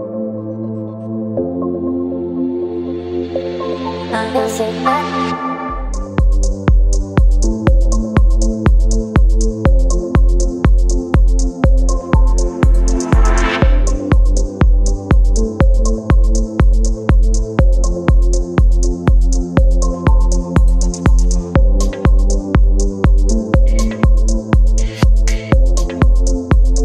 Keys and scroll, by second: 1.6 Delete, 3.0 space, 4.0 Delete, 4.7 space, 6.0 Delete, 7.2 Delete, 8.6 Delete, 13.0 Return, 13.4 v, 17.3 Return, 17.9 space, 19.4 ctrl+t, 19.8 Return, 22.7 t, 25.9 Return.